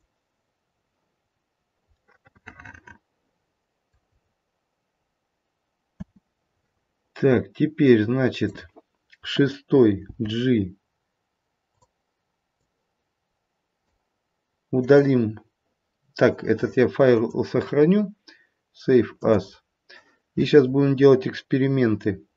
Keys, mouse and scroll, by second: 0.6-1.2 scroll down 1, 1.2 scroll down 2, 2.0 middle click, 2.0-2.7 scroll down 2, 4.0-4.9 scroll up 4, 5.9 space, 7.8 click, 10.0 g, 12.4 click, 14.8 click, 19.6 click.